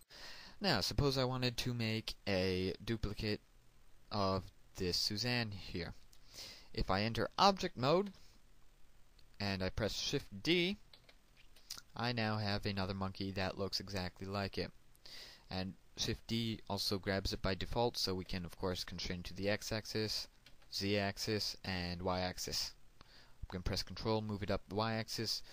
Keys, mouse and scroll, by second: 6.1 shift+middle click, 8.5-10.2 scroll down 1, 10.2 Tab, 13.1 shift+d, 20.4 x, 22.6 z, 23.8 y.